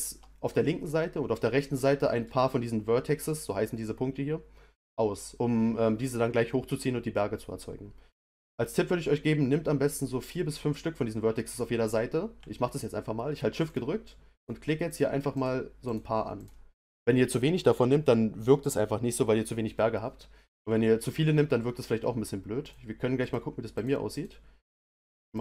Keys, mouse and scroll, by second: 13.7 shift+click, 14.3 shift+click, 14.9 shift+click, 15.3 shift+click, 15.8 shift+click, 16.4 shift+click, 22.6 shift+click, 23.2 shift+click, 23.7 shift+click, 24.1 shift+click, 24.7 shift+click, 25.3 shift+click.